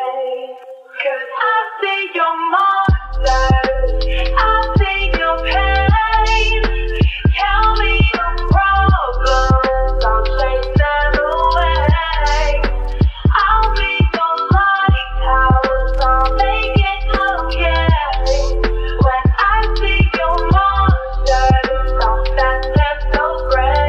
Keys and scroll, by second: 1.5 ctrl+d, 3.8 s, 5.6 r, 21.7 u.